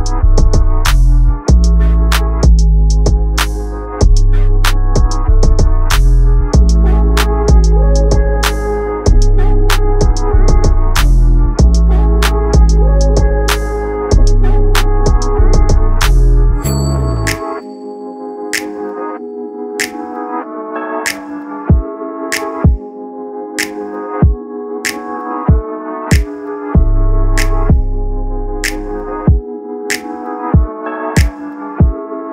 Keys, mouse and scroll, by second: 0.1 click, 0.7 click, 2.7 click, 4.9 click, 5.2-6.3 right drag, 6.3 click, 6.6 click, 7.4 shift+d, 8.5 click, 9.8 click, 10.4 click, 10.8 click, 11.1 right click, 11.8 click, 12.1 scroll up 2, 12.5 click, 13.6 click, 13.9 click, 14.6-14.9 scroll up 2, 15.1 click, 15.4 right click, 16.0 scroll down 1, 16.9 click, 17.4 click, 17.8-19.8 drag, 20.3 click, 21.1-23.1 drag, 25.6 Tab, 27.4 m, 28.9 right click, 29.6 m, 30.7-31.1 scroll up 2, 31.1 scroll down 2, 32.0 click.